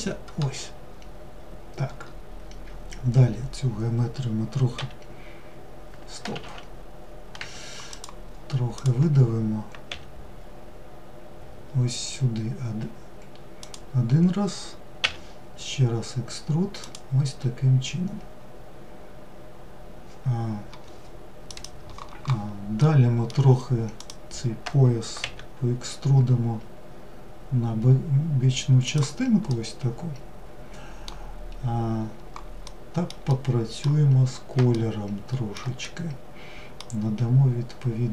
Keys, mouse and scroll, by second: 0.0-0.8 scroll down 2, 0.8-2.9 scroll down 1, 7.1 click, 7.9 click, 22.0-23.2 middle drag, 23.2 click, 28.7-30.8 middle drag, 30.8-31.9 scroll down 3, 31.9-38.1 middle drag.